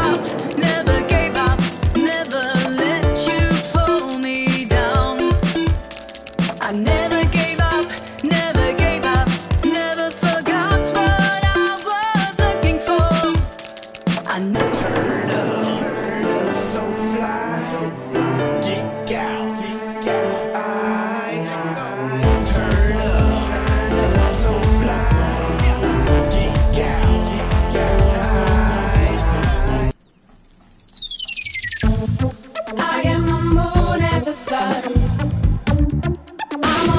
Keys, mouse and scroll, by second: 2.5-3.8 middle drag, 2.5-3.3 scroll, 3.8-5.5 scroll down 4, 5.5 scroll up 4, 5.9-7.9 drag, 8.2-9.7 drag, 10.8 click, 11.8 click, 12.4-20.7 drag, 21.0-23.1 drag, 22.9 right drag, 23.1 right click, 23.2 click, 23.3 right click, 23.5 click, 23.8-24.7 scroll up 4, 24.7-25.5 drag, 25.5-27.8 scroll up 3, 29.8 click, 29.9-31.4 scroll, 31.4-34.3 typing, 32.0 click, 32.4 scroll down 5, 33.1 click, 33.9 click, 35.3 click, 35.5 click, 36.4 click, 36.5-36.8 right drag, 36.8-36.9 drag.